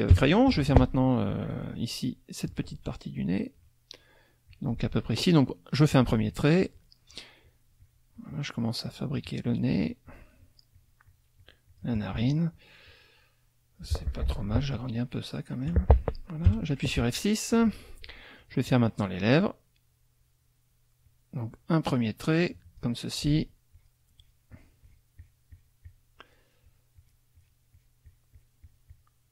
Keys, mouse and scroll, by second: 0.1 F6, 0.3 click, 4.5 click, 6.3 shift+click, 6.8-8.5 shift+drag, 8.8-11.9 shift+drag, 14.7 ctrl+F1, 14.9 ctrl+click, 15.9 ctrl+click, 16.5 F6, 16.6 click, 17.2 click, 21.0-23.0 drag, 23.7 shift+click, 24.2 shift+click, 26.7 shift+click.